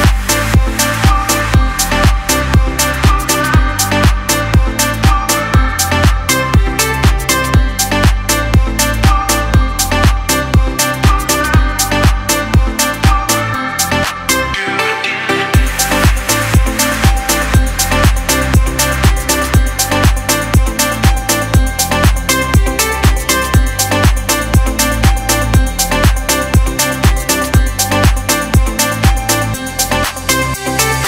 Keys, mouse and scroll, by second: 0.5-1.7 scroll up 1, 1.7 Return, 2.1 click, 2.5 scroll up 1, 3.4 click, 4.8 space, 5.0 click, 5.4 space, 8.8-14.4 drag, 18.0-28.3 drag.